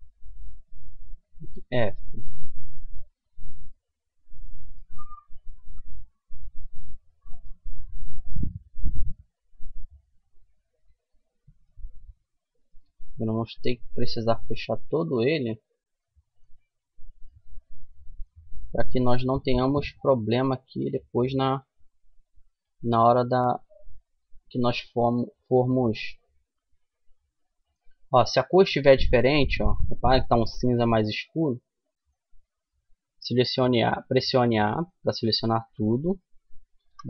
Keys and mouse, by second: 0.8 f, 1.2-3.8 middle drag, 4.5-9.6 middle drag, 11.9-13.8 drag, 13.0 f, 15.4 middle click, 16.1-18.5 middle drag, 19.3-22.4 right drag, 21.1 f, 24.5 f, 25.1 right click, 25.8 a, 28.2 middle click, 28.7 middle click, 29.2 middle click, 31.3-32.3 middle drag, 32.3 a, 33.0-37.0 middle drag, 36.2 w.